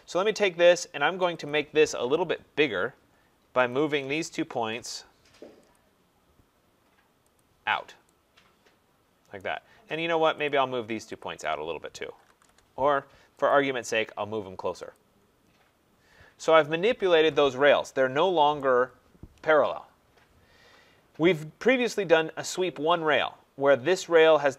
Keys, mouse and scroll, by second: 1.5 click, 3.7 shift+click, 4.3-5.2 typing, 5.7 click, 7.4 click, 9.4 right click, 10.4 click, 11.2 shift+click, 11.8-12.8 typing, 13.5 click, 14.9 click, 15.7 middle click, 15.8 middle click, 16.2 Escape, 16.4 Escape, 16.8-17.3 scroll down 3, 18.5 right click, 21.4 middle click, 21.5 middle click, 22.0 middle click, 22.9 click.